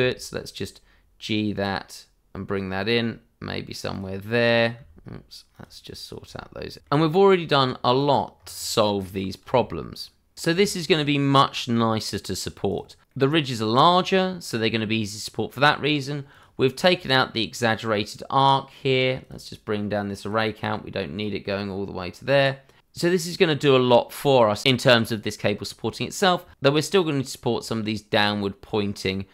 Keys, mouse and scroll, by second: 3.9 click, 4.7-6.4 typing, 4.8 click, 5.3 click, 5.8 click, 6.3 click, 6.6 click, 7.1-8.1 scroll up 2, 7.4 click, 8.1 g, 9.7 click, 9.9-10.9 scroll down 1, 11.1 Tab, 11.5 click, 11.6 scroll down 1, 11.7 middle click, 12.0-12.3 scroll up 1, 12.5 click, 13.0 middle click, 13.8 click, 14.0-14.4 scroll up 1, 14.4 middle click, 15.1-16.3 scroll down 1, 16.3 click, 19.2 click, 20.4 double click, 22.8 scroll down 1, 23.7 click, 23.9 shift+middle click, 24.2 scroll up 1, 25.5 scroll up 1, 26.2 shift+middle click, 27.2 scroll up 1.